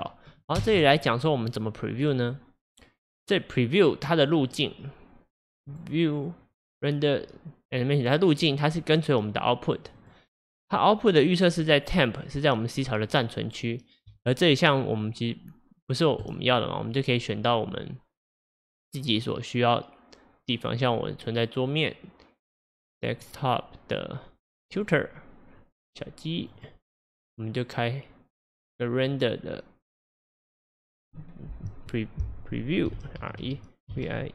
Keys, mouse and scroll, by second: 0.6 space, 4.5-8.1 drag, 10.0 click, 11.2-14.2 drag, 16.3 click, 16.5-34.3 drag.